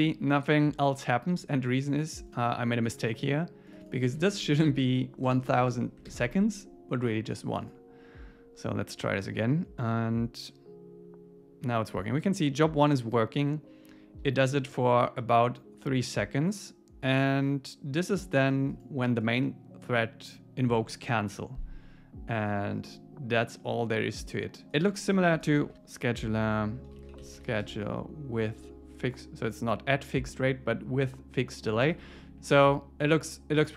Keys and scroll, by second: 4.8 Right, 6.1 super+s, 25.4 Return, 31.7 Down, 32.2 Up.